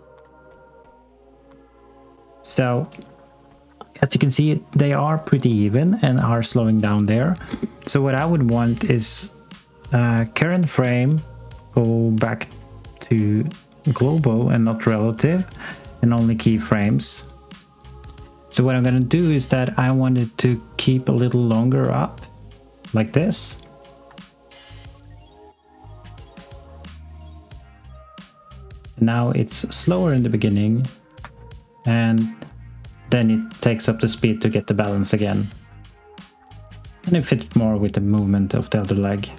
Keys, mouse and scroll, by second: 24.0 x, 31.1 s, 31.6 click.